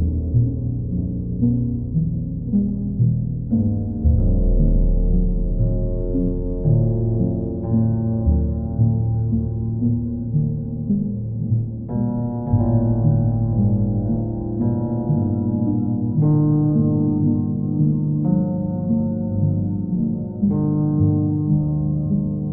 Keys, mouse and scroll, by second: 3.4 click, 6.2 click, 11.7 shift+click, 14.0 click, 14.8 click, 15.0 shift+click, 15.9 shift+click, 16.7 click, 20.0 click, 20.7 click, 21.6 shift+click, 21.7 shift+click.